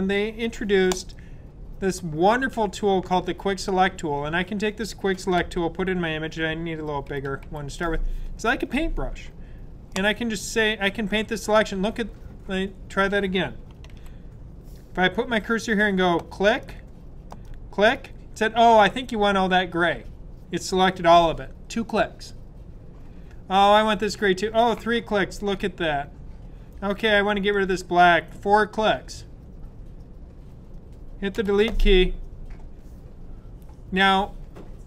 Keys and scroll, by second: 5.3-7.4 typing, 13.8 super+z.